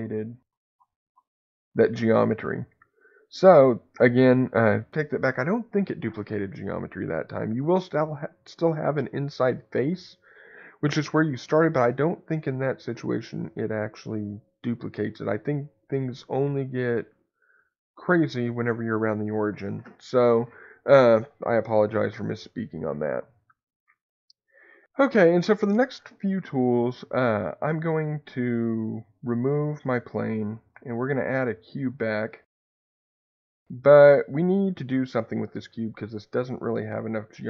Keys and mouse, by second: 3.4 ctrl+z, 28.6 Tab, 29.7 x, 31.0 shift+a, 35.6 middle click, 36.8 click.